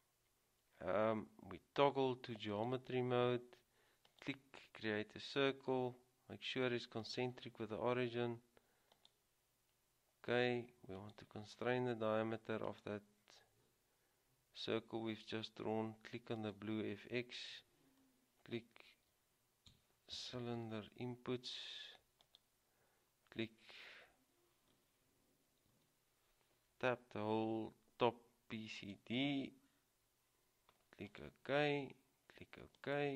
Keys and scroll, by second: 19.1-21.0 typing, 25.8 typing.